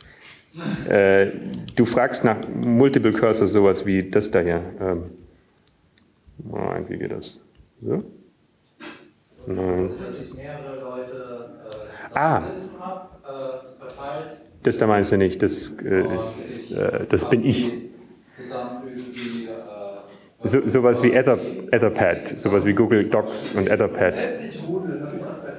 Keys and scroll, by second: 5.5 Up, 6.0 Up, 6.5 Down, 6.5 Right, 7.8 Right, 7.8 Left, 8.1 Up, 8.8 Up, 8.8 Down, 13.8 ctrl+g, 18.8 Right.